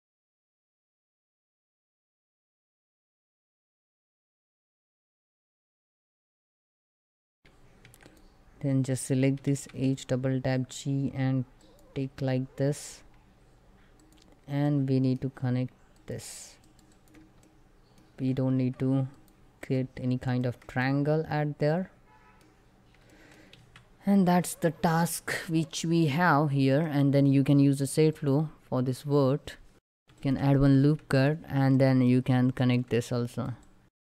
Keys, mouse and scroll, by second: 32.3 shift+Caps_Lock, 32.3 shift+click, 33.0 right click, 33.3 click.